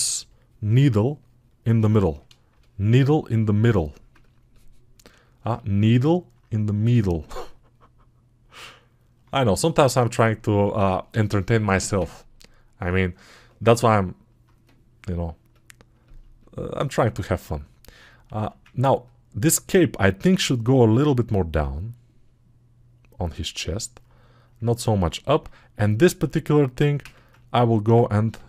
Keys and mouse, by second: 25.3 alt+q, 25.3-28.4 alt+right drag.